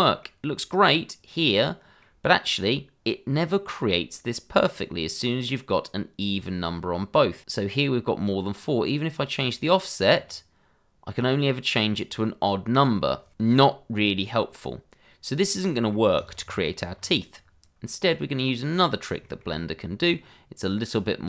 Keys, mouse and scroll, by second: 9.3 click, 13.9-14.3 scroll down 1, 14.3 middle click, 16.2 click, 16.4-16.9 scroll down 1, 16.9-18.1 scroll up 1, 18.1 click, 18.8 scroll down 1, 19.2 shift+middle click, 19.5 scroll up 1, 20.1 middle click.